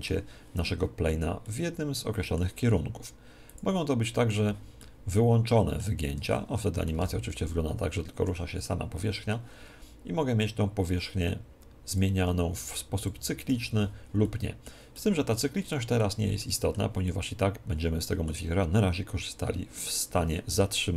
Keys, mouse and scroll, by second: 1.4-3.2 middle drag, 3.4 click, 4.8 middle click, 5.3-8.4 middle drag, 7.0 alt+a, 8.2 Escape, 9.7 middle click, 11.8-15.2 drag, 14.9 middle click, 15.2-19.0 middle drag.